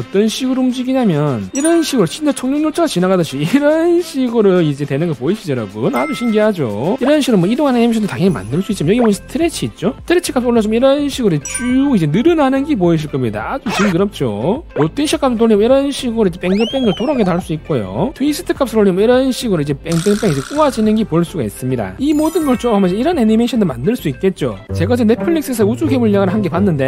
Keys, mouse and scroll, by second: 0.1 alt+middle click, 0.8 middle click, 2.1-6.9 drag, 7.3-9.5 drag, 10.7-14.6 drag, 15.3-18.0 drag, 18.6-21.9 drag.